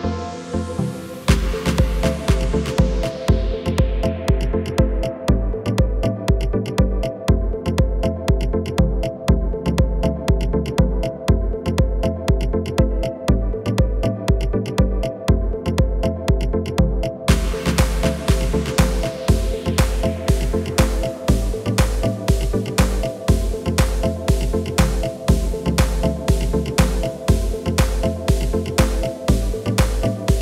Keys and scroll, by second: 3.0 Delete, 11.1 Delete, 14.6 a, 16.1 F3, 17.4-18.0 typing, 18.6 Down, 18.8 Return, 22.5 g, 23.1 Escape, 24.0 Tab, 28.5 KP_7, 29.5 Tab.